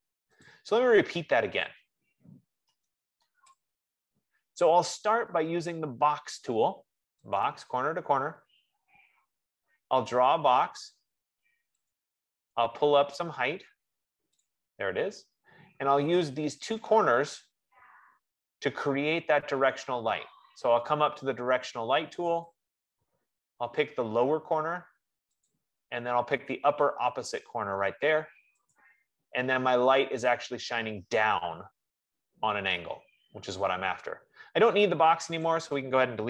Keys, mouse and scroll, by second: 0.8 click, 2.0 click, 2.8 F15, 2.9-3.3 typing, 3.6 Return, 7.8 click, 10.4 click, 12.2 click, 14.7 click, 22.7 click, 26.0 click, 29.1 click, 33.9 click, 35.9-36.2 drag.